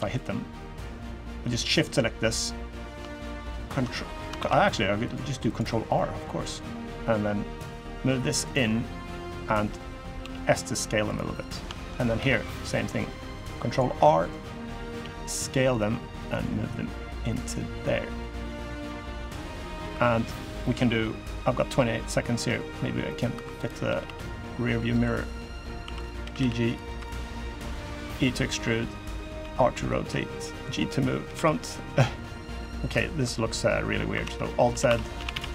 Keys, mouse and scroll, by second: 0.4 shift+click, 1.0 shift+click, 1.6 shift+click, 2.4 shift+click, 3.7 middle click, 4.1 ctrl+r, 5.7 middle click, 6.6 middle click, 7.4 click, 9.9 s, 11.1 middle click, 11.5 shift+middle click, 11.9 ctrl+r, 13.7 middle click, 14.7 s, 16.0 click, 18.3 click, 19.1 scroll down 3, 19.3 scroll up 1, 19.4 middle click, 19.7 3, 20.1 click, 20.4 middle click, 21.6 scroll up 1, 22.0 middle click, 22.8 middle click, 23.1 2, 23.4 click, 23.6 g, 25.6 1, 25.7 click, 26.0 g, 26.6 3, 26.7 click, 27.3 middle click, 27.8 e, 29.1 r, 29.9 g, 31.0 KP_3, 31.9 scroll up 1, 32.0 scroll down 3, 32.3-32.6 scroll up 1, 34.0 alt+z, 34.4-35.4 typing.